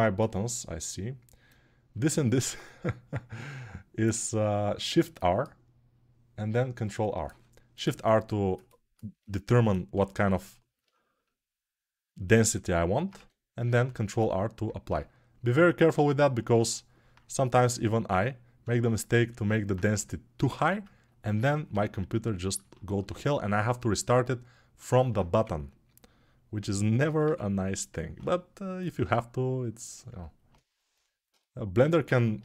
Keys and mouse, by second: 0.0-32.4 drag, 9.7 6, 13.7 alt+1, 21.5 g, 25.1 2, 32.2 ctrl+1.